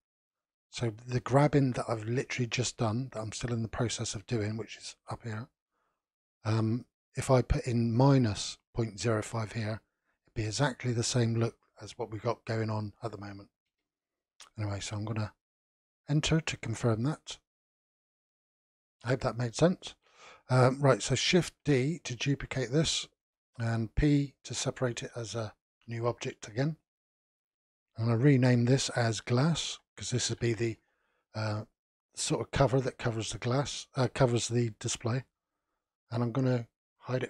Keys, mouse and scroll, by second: 15.1-16.5 middle drag, 16.5-17.5 scroll up 2, 17.5-20.0 shift+middle drag, 20.0-21.5 scroll down 1, 21.5 shift+d, 24.0 p, 27.1-30.2 drag, 30.4 s, 36.8 click.